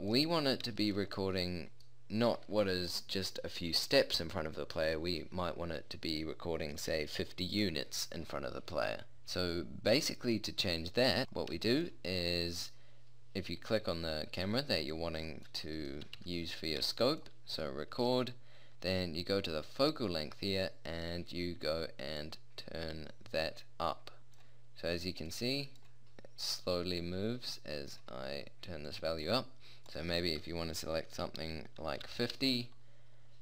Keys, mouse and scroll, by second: 0.4-1.5 middle drag, 10.7-11.1 right drag, 16.0 g, 16.8 g, 21.0 middle click, 21.3-32.2 drag.